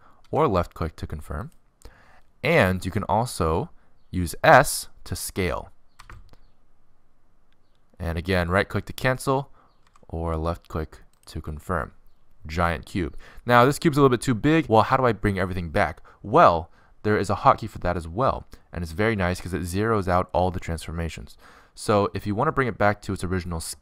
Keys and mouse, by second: 1.2 r, 6.4 s, 10.5 s, 15.3-23.8 middle drag.